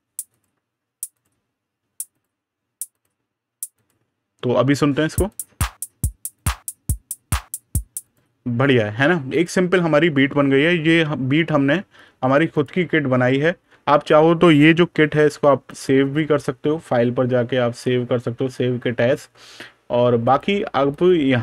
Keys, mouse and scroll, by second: 1.0 click, 5.1 click, 9.2 click, 12.4 click, 14.9 super+KP_Add, 15.5 click, 20.1 click.